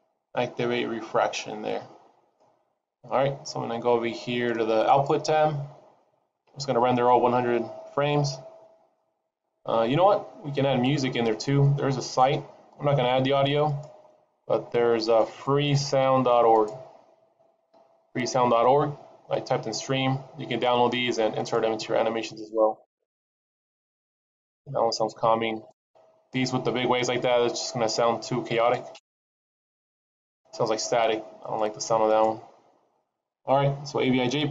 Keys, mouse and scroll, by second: 4.9 click.